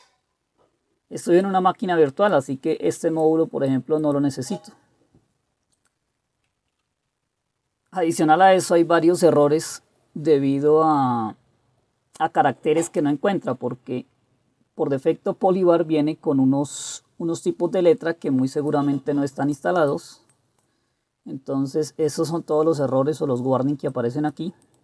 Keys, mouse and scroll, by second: 9.3-12.0 scroll down 1, 12.0-13.0 scroll down 1, 13.0-15.0 scroll down 1, 15.0-18.8 scroll down 1, 18.8-19.7 scroll down 1, 19.7-22.8 scroll down 1, 22.8-24.0 scroll down 1, 24.0-24.8 scroll down 1.